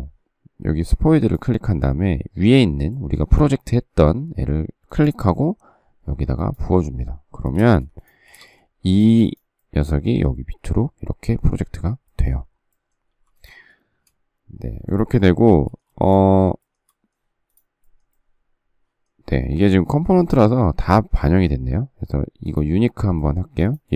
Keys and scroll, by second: 7.5 space, 7.7 Escape, 8.2 space, 8.4 Escape, 13.1 m, 15.8 shift+space.